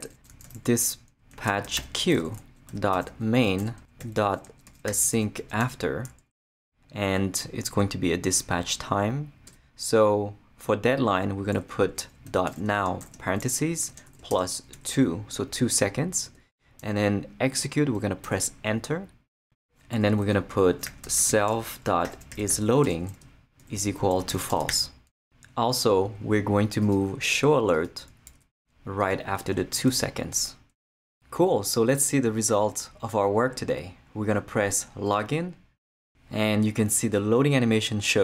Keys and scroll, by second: 0.1-6.1 typing, 9.5 Return, 12.2-14.7 typing, 16.3 Tab, 18.2 Return, 20.5-25.2 typing, 28.3 shift+super+x, 29.1 super+x, 29.9 super+v.